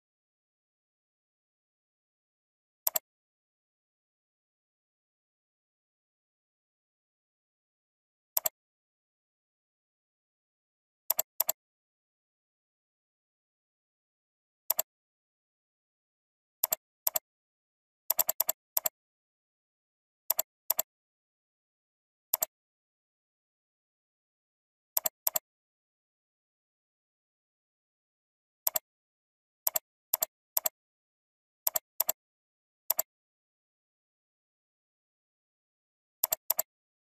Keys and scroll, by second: 2.2 ctrl+t, 18.3 ctrl+space, 20.6 alt+space, 28.3 ctrl+g.